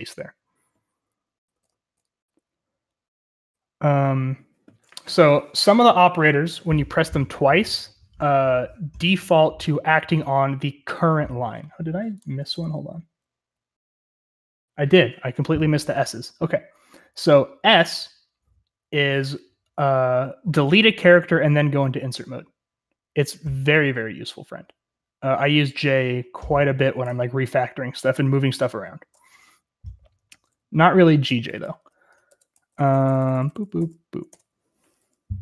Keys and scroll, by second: 1.5-2.5 typing, 12.5-13.5 typing, 15.0-16.1 typing, 30.8-35.4 typing, 34.3 Escape.